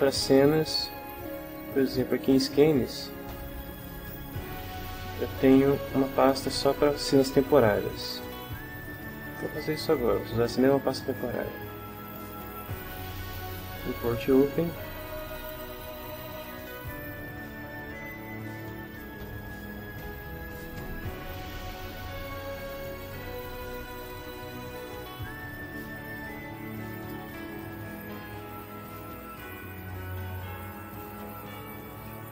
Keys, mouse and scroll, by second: 2.1 click, 3.3 click, 6.3 click, 8.1 click, 12.1 click, 14.0 click, 15.5 click, 19.0 f, 19.7 shift+middle click, 20.5 ctrl+shift+middle click, 21.3 ctrl+shift+middle click, 23.0 click, 24.0 click, 25.1 ctrl+middle click, 26.9 click, 31.1-32.3 middle drag.